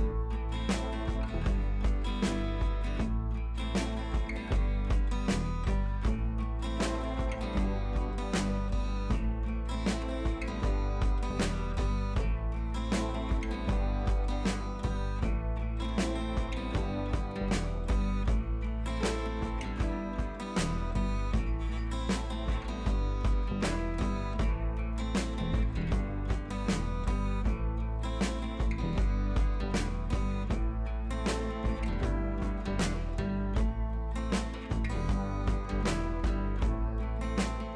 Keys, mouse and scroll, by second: 2.2 Left, 3.6 click, 3.7 Right, 3.9-4.9 scroll down 1, 5.0-7.2 drag, 9.7 ctrl+c, 9.9 click, 10.4 t, 11.5 click, 12.2 ctrl+v, 14.1-15.4 drag, 25.2 click, 26.7-28.0 drag, 34.2-34.7 scroll up 1, 34.9 ctrl+t, 35.5 click, 35.6 ctrl+r, 37.2 click, 37.3 ctrl+t.